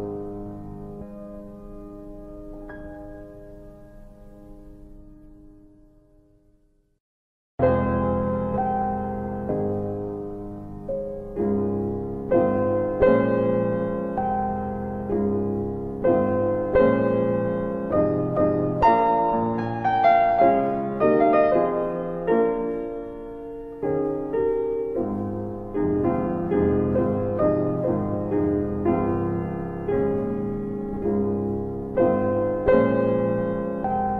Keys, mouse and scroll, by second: 0.0 click, 5.9 right click, 6.9 click, 8.7 right click, 9.3 alt+middle click, 14.0 click, 15.2 right click, 15.6 w, 17.8 click, 19.9 alt+w, 20.4 alt+w, 20.8 z, 21.3 middle click, 21.5 scroll down 1, 21.8 alt+w, 22.1 alt+w, 22.7 z, 24.0 middle click, 24.2-24.7 scroll up 1, 25.4 ctrl+shift+r, 27.5 alt+w, 27.9 alt+w, 31.2 right click, 33.2 alt+w, 33.5 alt+w.